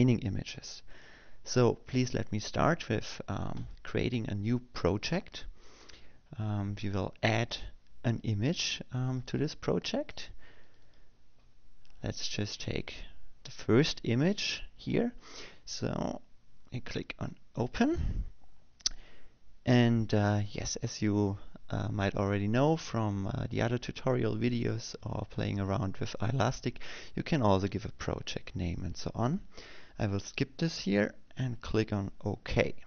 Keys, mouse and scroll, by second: 5.3 click, 9.1 click, 10.8 click, 12.1 click, 14.1 click, 16.1 click, 19.3 click, 25.1 click, 32.5 click.